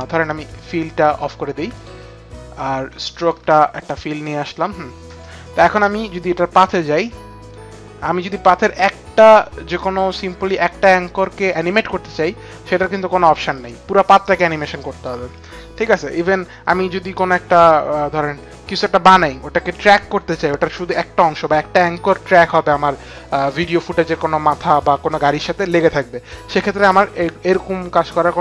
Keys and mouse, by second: 0.3 alt+click, 1.0 alt+click, 1.5 alt+click, 6.5 alt+click, 8.0 click.